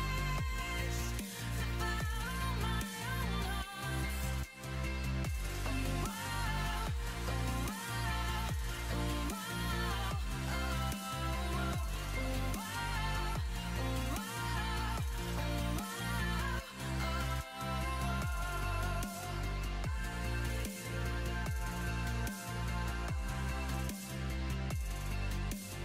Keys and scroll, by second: 6.9-7.8 typing, 13.0 4, 13.3 0.